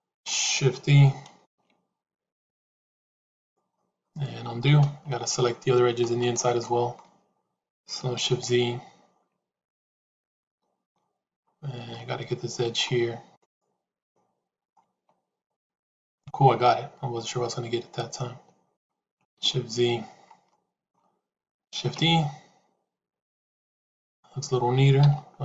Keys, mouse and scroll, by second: 1.3 shift+e, 3.6 middle click, 4.8 ctrl+z, 5.0 middle click, 6.5 middle click, 9.9 shift+z, 10.3 middle click, 11.9 middle click, 13.2 shift+click, 13.9 middle click, 15.3 shift+click, 16.1-18.8 middle drag, 19.6 shift+z, 20.4 middle click, 25.2 shift+z.